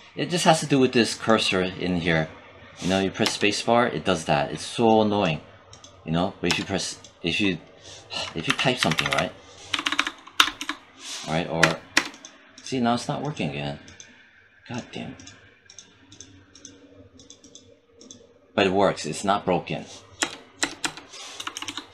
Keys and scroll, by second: 3.1 space, 6.3 space, 8.3 j, 9.6 BackSpace, 11.5 space, 20.0 space, 21.2 BackSpace.